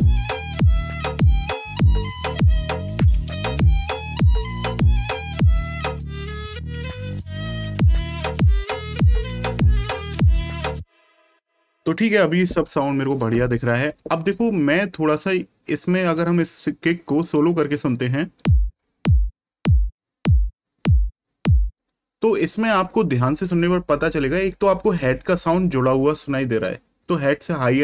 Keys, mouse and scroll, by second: 9.7 click, 16.0 right click, 17.2 click, 21.7 click.